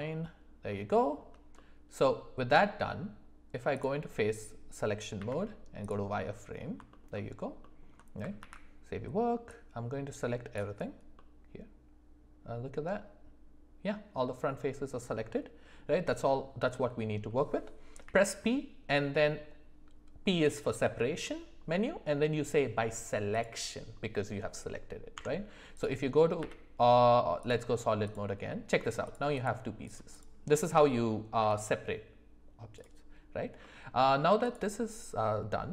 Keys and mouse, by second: 0.9 shift+middle click, 1.5 middle click, 3.7 click, 5.2 z, 6.9 alt+middle click, 7.1 alt+middle click, 8.4 ctrl+s, 9.6 click, 11.1-15.8 middle drag, 18.0 p, 25.1 Tab, 26.4 z, 28.0 click, 28.4 middle drag, 29.3 click, 30.1 click, 31.4 g, 33.6-34.0 middle drag, 34.4 click, 35.2 middle click.